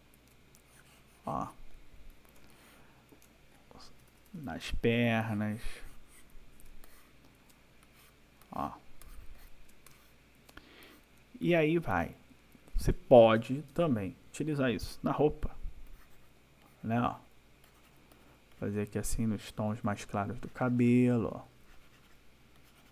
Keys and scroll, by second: 2.4 space, 4.0 \, 6.7 space, 9.7 space, 13.4 ctrl+-, 19.5 ].